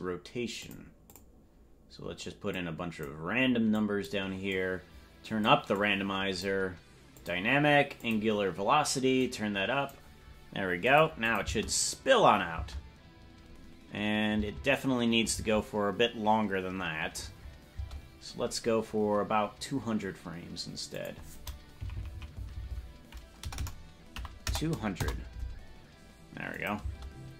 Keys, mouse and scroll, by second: 0.6 click, 1.0 click, 2.5 click, 3.7 click, 4.4-5.4 drag, 5.7 click, 7.1 click, 7.9 click, 9.1 click, 10.9 click, 11.3-12.7 drag, 11.5 space, 12.6 space, 15.5 space, 17.2 space, 17.8 space, 20.9-25.5 drag, 21.9 Left, 22.1 Left, 22.5 Right, 22.9 Right, 23.5 BackSpace, 26.6 click, 26.8 space.